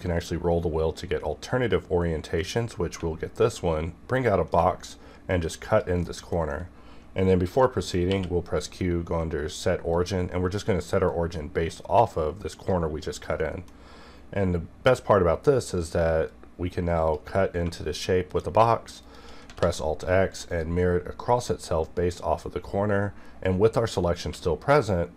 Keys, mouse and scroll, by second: 2.4-5.7 ctrl+drag, 6.0 middle click, 8.1 q, 9.9-13.4 drag, 13.4 middle click, 13.8-15.5 scroll up 1, 16.3-18.3 drag, 19.6 alt+x, 20.5 click, 24.2 q.